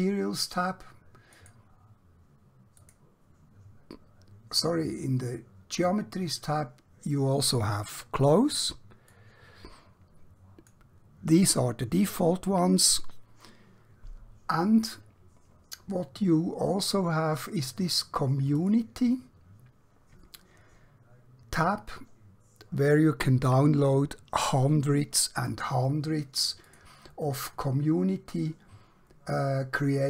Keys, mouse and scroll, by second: 9.1-10.7 drag, 18.5 click, 26.6 click.